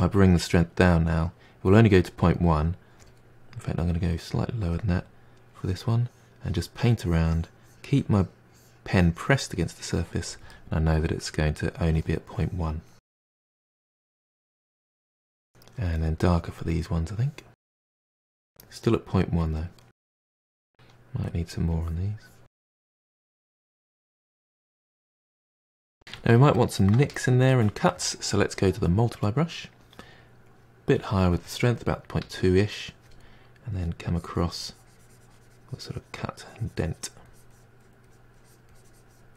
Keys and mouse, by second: 0.5-3.5 drag, 3.8-8.5 drag, 10.5-11.8 middle drag, 11.8-13.7 drag, 13.8-14.2 middle drag, 14.2-15.0 drag, 15.0-16.0 ctrl+shift+middle drag, 16.0-16.8 drag, 16.9 middle drag, 17.1-17.7 drag, 17.7 middle drag, 17.8-18.4 drag, 18.4 middle drag, 18.6 click, 18.8 middle click, 19.0 drag, 19.3 middle click, 19.5-19.8 drag, 19.8 middle drag, 20.0 click, 20.2 middle click, 20.4 drag, 20.6-21.0 middle drag, 21.0 drag, 21.2 middle click, 21.4 drag, 21.6 middle click, 21.8 drag, 22.0-25.0 middle drag, 26.1-30.1 shift+middle drag, 30.5-32.2 drag, 32.2 f, 33.8-39.3 drag.